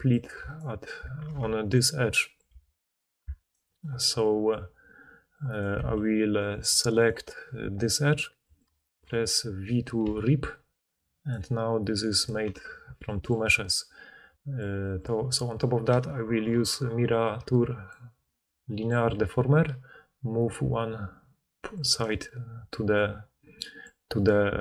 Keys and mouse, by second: 0.1 d, 0.2 d, 0.4 alt+click, 1.3 2, 1.6 alt+click, 2.5 a, 2.9 click, 2.9 middle click, 2.9 right click, 3.3 alt+click, 3.3 alt+middle click, 3.3 alt+right click, 3.6-5.5 alt+drag, 3.6 alt+middle click, 3.6 alt+right click, 5.6 click, 5.7 a, 6.6-13.6 alt+drag, 6.7 alt+middle click, 6.7 alt+right click, 6.9 alt+middle click, 6.9 alt+right click, 10.0 v, 12.1 middle click, 12.1 right click, 12.5 4, 16.2 ctrl+d, 18.0 click.